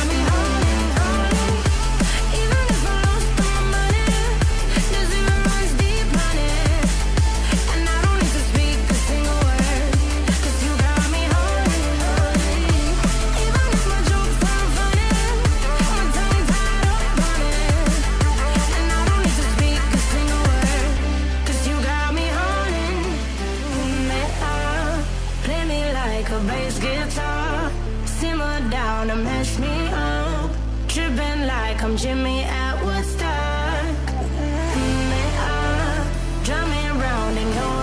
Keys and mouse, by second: 0.9 g, 2.2 g, 6.1 click, 6.6 KP_3, 6.9 g, 9.5 r, 10.3 r, 14.6 ctrl+Tab, 14.8 click, 15.5 click, 15.9 click, 17.8 ctrl+Tab, 18.8 click, 19.7 click, 20.0-25.6 drag, 21.0 BackSpace, 21.1 BackSpace, 21.8 Down, 22.6 Down, 24.7 Tab, 25.0 Tab, 25.9 click, 26.3 ctrl+Tab, 26.4 click, 26.7 g, 27.5 ctrl+z, 28.1 KP_3, 28.6 g, 30.0 g, 33.9 g.